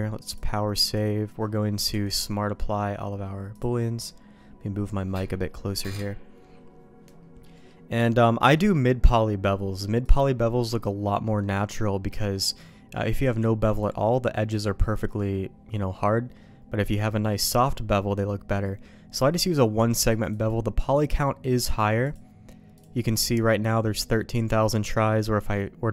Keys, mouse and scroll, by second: 0.3 click, 1.9 q, 7.6 middle click, 8.5 middle click, 10.1 click, 11.4 middle click, 12.2 shift+middle click, 13.6 click, 17.5 click, 20.1 click.